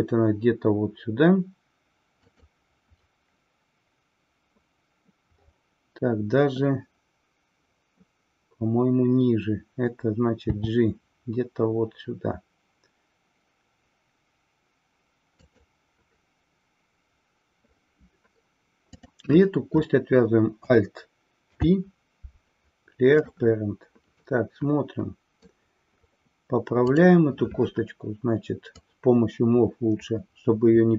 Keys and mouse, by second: 19.0 click, 21.4 alt+p, 24.2-25.6 middle drag, 28.8-30.9 drag.